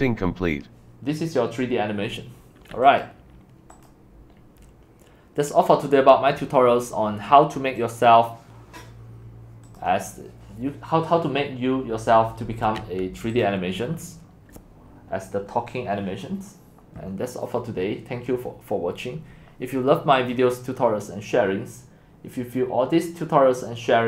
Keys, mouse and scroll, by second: 0.0-7.8 drag, 13.3 click, 20.3 click.